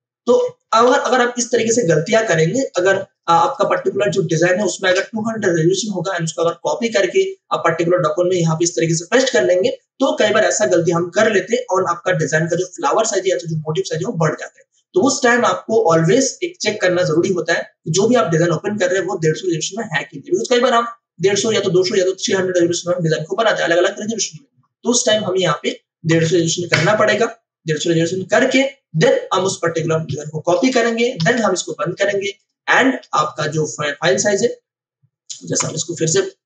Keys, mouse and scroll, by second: 0.6 ctrl+d, 2.8 space, 3.1 ctrl+alt+click, 17.1 click, 19.3 ctrl+alt+i, 25.4 click, 26.1 1, 27.6 0, 28.3 Return, 30.0 ctrl+a, 31.5 ctrl+w, 32.3 click, 33.0 v, 33.3 click, 34.6-34.9 scroll down 1, 35.3 click, 35.5 Delete.